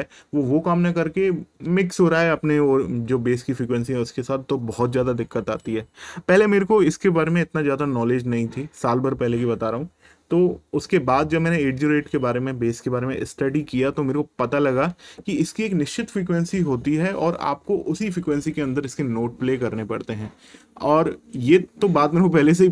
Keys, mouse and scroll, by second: 21.1 click.